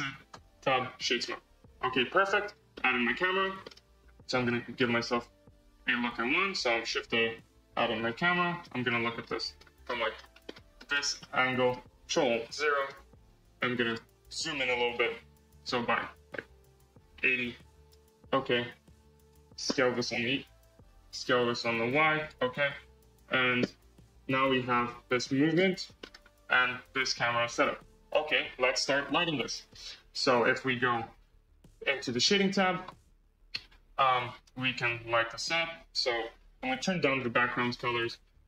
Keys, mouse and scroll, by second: 0.2 Tab, 0.5-1.1 right drag, 1.1-2.3 middle drag, 2.3-2.7 scroll up 3, 2.7-3.3 middle drag, 3.3 scroll up 2, 3.6-4.1 middle drag, 4.1 scroll up 2, 4.4 middle click, 4.7 scroll down 5, 5.6 shift+a, 6.8 shift+a, 8.5-10.2 middle drag, 10.2 scroll down 1, 10.4-10.8 middle drag, 10.8 scroll down 1, 10.8 scroll down 1, 11.1-12.3 middle drag, 12.3 ctrl+alt+KP_0, 13.8-14.9 drag, 15.4-17.9 drag, 19.2 click, 19.8 s, 21.4 s, 23.0-23.7 scroll, 23.7 space, 24.9 click, 25.7 g, 29.3 space, 33.0 click, 34.2-34.8 scroll, 34.8 KP_0, 36.6-38.2 drag, 38.2 z.